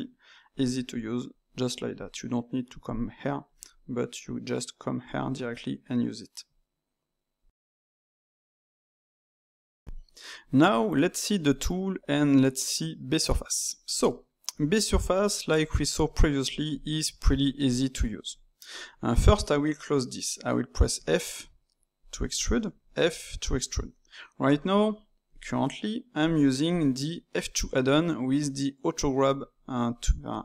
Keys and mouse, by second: 5.2-7.9 ctrl+middle drag, 11.5 click, 14.0-15.9 ctrl+middle drag, 15.9 click, 16.7 click, 17.6 click, 18.5 middle click, 19.1 click, 20.9 f, 22.3 click, 22.7 f, 24.5-27.7 drag.